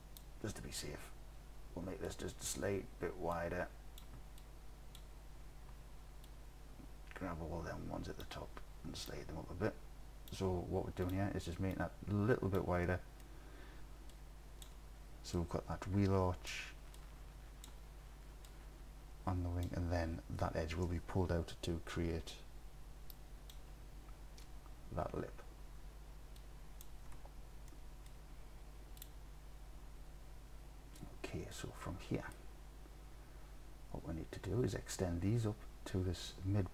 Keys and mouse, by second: 2.2 click, 3.4 click, 4.5 click, 6.3-8.3 drag, 9.2 click, 11.8 click, 12.9-13.2 middle drag, 14.1 click, 15.4-16.5 drag, 17.0 click, 18.6-19.7 drag, 27.8 click, 31.6 click.